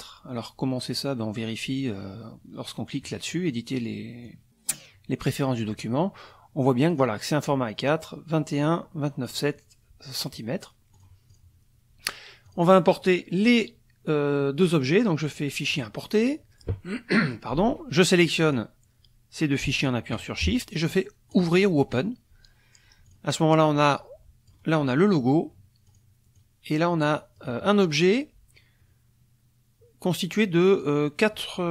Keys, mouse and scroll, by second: 2.9 click, 4.2 click, 6.9 click, 10.9 click, 11.3 click, 12.5 click, 15.7 click, 18.5 click, 19.8 shift+click, 21.3 click, 23.1 click, 23.5-24.7 drag, 25.8 click, 26.3-27.5 drag.